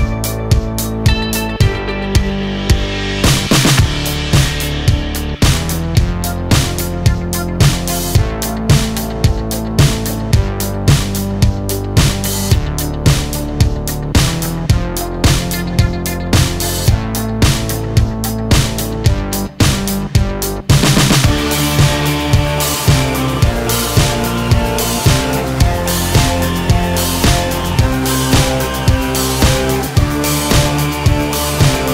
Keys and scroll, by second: 4.2 ctrl+z, 31.2 ctrl+a.